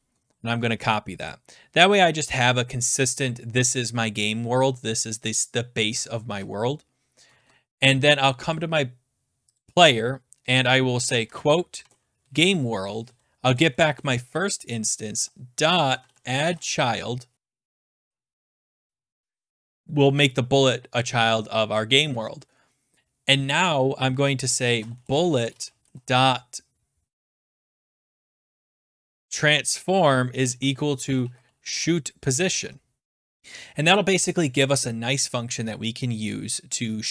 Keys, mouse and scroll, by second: 0.1 ctrl+a, 0.7 ctrl+c, 1.3 click, 7.3 ctrl+s, 8.5 click, 9.6 click, 10.5 click, 11.2 ", 11.8 ctrl+v, 12.2 Right, 13.0 Right, 13.1-20.2 typing, 24.4-32.4 typing, 32.6 Tab.